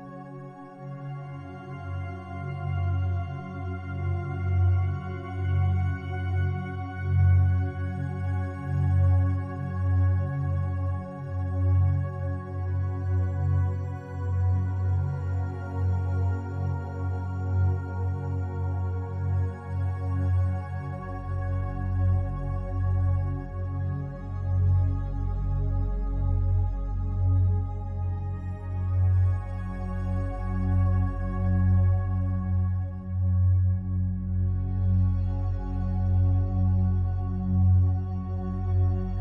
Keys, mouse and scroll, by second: 0.0-8.1 drag, 8.1 Escape, 8.3 Escape, 9.7 click, 10.9 click, 11.2 click, 15.4 click, 16.6 alt+click, 18.6-20.7 ctrl+alt+drag, 20.9 ctrl+alt+click, 22.7 a, 25.0 1, 25.6 u, 26.5 click, 29.7-30.0 typing, 31.2 click, 33.5 alt+shift+click, 34.6 ctrl+alt+click, 35.7-39.2 ctrl+alt+drag.